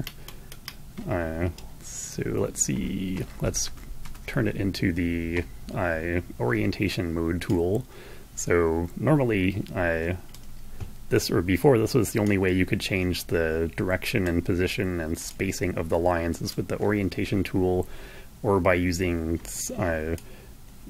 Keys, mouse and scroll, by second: 0.0-0.4 ctrl+scroll down 1, 1.5 click, 3.2 shift+m, 4.0 shift+m, 7.4-10.0 drag, 12.0-14.3 drag, 15.2-20.8 drag.